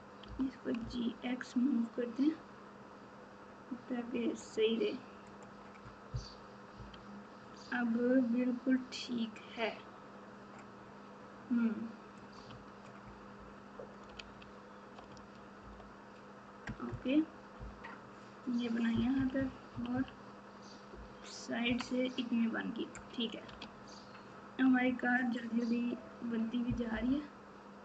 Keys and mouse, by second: 0.2 g, 6.7 KP_1, 14.0 alt+Tab, 14.1 alt+z, 15.6 KP_Divide, 16.6 KP_Add, 19.7 KP_6, 20.9 KP_4, 23.6 alt+z, 24.8 Tab, 26.9 KP_Divide.